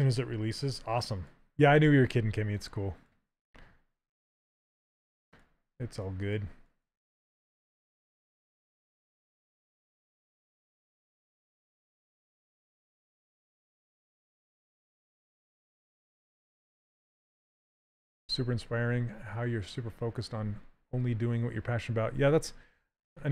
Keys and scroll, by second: 5.6 s.